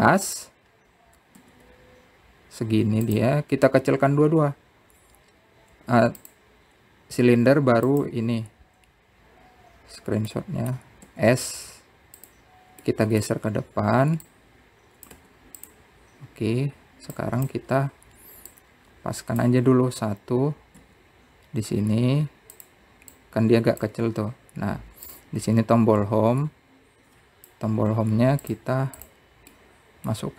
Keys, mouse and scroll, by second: 3.2 s, 8.0 click, 9.6 shift+click, 12.1 middle click, 12.9 s, 14.7 middle click, 15.2 scroll down 1, 16.0 click, 18.0-18.9 scroll down 3, 18.9 click, 19.5-20.3 scroll up 4, 20.3 click, 21.5-22.5 scroll up 3, 22.6 s, 24.9 click, 26.0-26.9 scroll up 1, 26.9 click, 30.2 click.